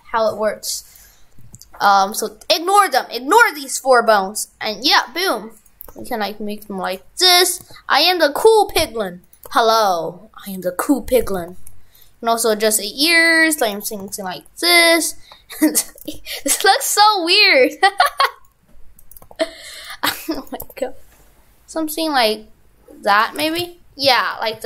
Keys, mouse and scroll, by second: 1.5 ctrl+Tab, 2.0 right click, 4.1 r, 5.6 right click, 5.9 r, 7.4 right click, 7.7 r, 9.2 right click, 9.5 r, 11.2 right click, 11.2 right click, 11.4 r, 13.7 right click, 14.0 r, 17.3 right click, 17.6 r, 19.1 right click, 19.2 r, 20.4 right click, 20.7 r, 23.4 shift+f.